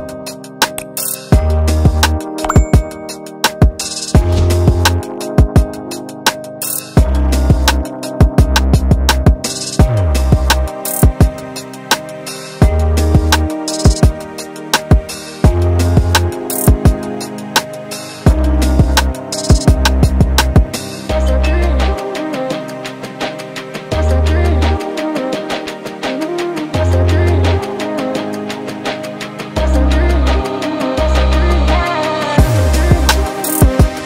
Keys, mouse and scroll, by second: 0.1 click, 2.7 alt+a, 3.0 click, 3.7 click, 6.5 alt+a, 7.2 KP_Divide, 9.7 alt+h, 10.7-11.0 scroll down 1, 11.2 middle click, 11.7 alt+a, 12.2 click, 12.8 h, 13.1-13.5 scroll up 2, 13.5-16.8 middle drag, 18.5 shift+middle click, 18.8-19.3 scroll up 3, 19.3 click, 19.6 Tab, 20.0-20.3 scroll up 2, 20.3 shift+middle click, 21.0 scroll down 1, 21.2 scroll up 1, 21.2-23.3 middle drag, 23.3-23.8 scroll up 2, 23.8 Tab, 24.6 Tab, 24.9 scroll up 3, 25.1-26.0 scroll down 1, 26.0-26.6 scroll down 1, 26.6 middle click, 27.4-27.8 scroll up 2, 27.8-29.8 shift+middle drag, 29.8 click, 32.2 click, 33.6 click.